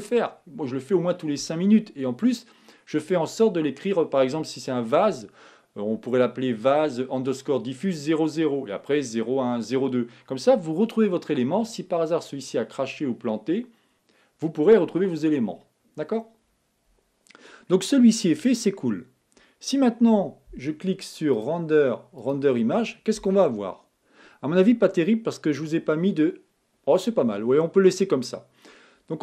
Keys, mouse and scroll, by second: 26.4 click.